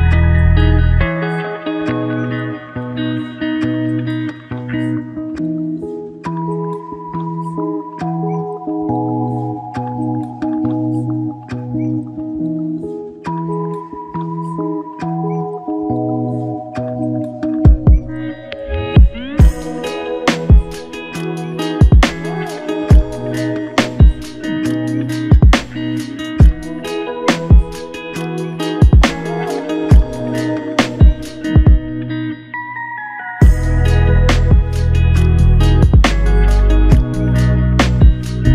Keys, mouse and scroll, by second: 0.2 ctrl+s, 0.6 ctrl+z, 1.4 ctrl+z, 4.5 ctrl+shift+click, 6.2 ctrl+shift+click, 7.8 ctrl+shift+click, 14.1 ctrl+z, 15.5 ctrl+shift+click, 19.3 ctrl+shift+click, 21.2 ctrl+shift+click, 33.2 ctrl+shift+click.